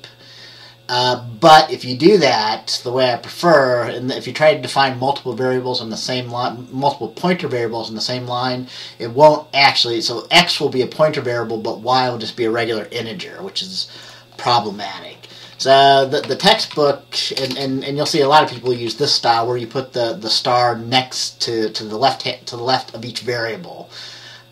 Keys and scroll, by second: 15.6 typing, 16.3 Down, 16.5 Down, 16.7 Down, 16.8 Down, 17.5 BackSpace, 17.6 BackSpace, 18.2 Right, 18.3 Right, 18.5 Right, 18.6 Right, 18.8 Right.